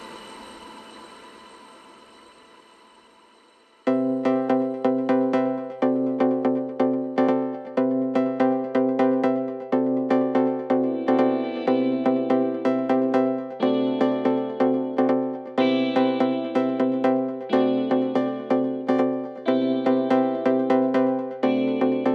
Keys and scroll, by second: 3.3 ], 10.4 4, 12.9 3, 13.4 ], 14.2 ], 14.9 ,, 19.9 4.